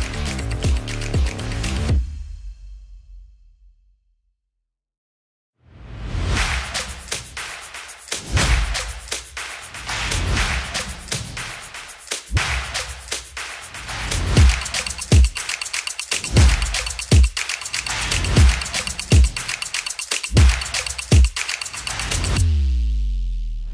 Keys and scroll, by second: 1.5 F4, 3.1 F5, 3.2 F5, 3.2 F5, 3.4 F5, 3.4 F5, 3.5 F5, 3.6 F5, 3.7 F5, 3.8 F5, 4.0-4.9 typing, 5.9 Return.